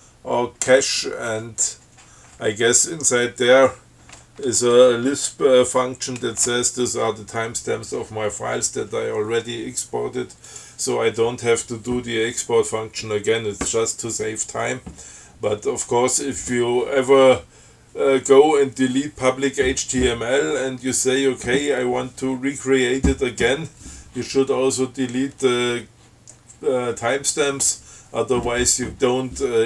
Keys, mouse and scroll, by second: 10.7 click.